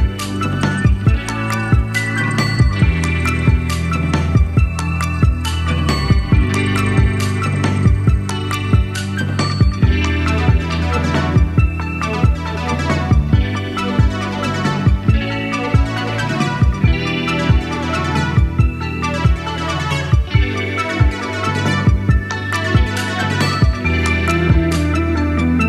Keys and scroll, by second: 9.2-10.4 scroll down 2, 14.3 Page_Down, 14.4 Page_Down, 14.8 Page_Down, 15.0 Page_Down, 17.4 super+d, 20.4 Right, 20.9 Right, 24.0 super+d.